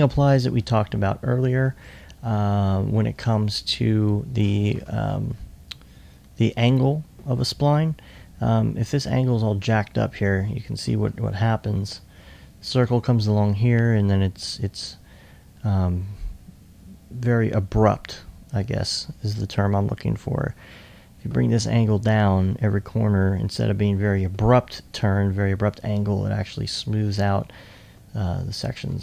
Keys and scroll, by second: 0.9-1.6 typing, 11.4 2, 13.2 2, 27.8 2.